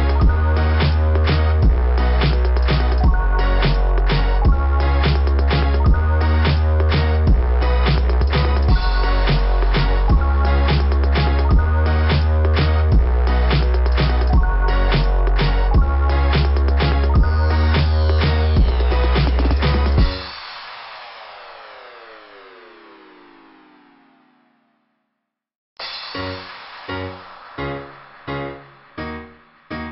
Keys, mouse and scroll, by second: 1.7 click, 2.5 click, 5.2 right click, 8.0 click, 8.2 click, 8.9 right click, 9.9 click, 12.9 click, 15.1 scroll down 2, 22.7-23.6 typing, 22.7 click, 25.7-26.7 scroll up 2, 26.7 click, 27.6 typing, 27.8 click.